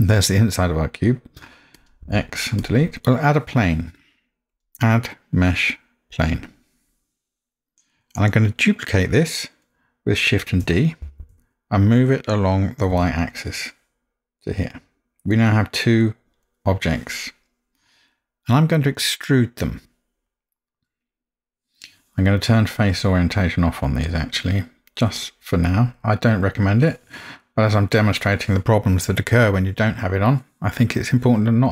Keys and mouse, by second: 1.8 click, 2.1 x, 4.6-6.3 drag, 11.0 shift+d, 15.3-16.4 middle drag, 19.8-20.7 middle drag, 26.6-29.7 drag.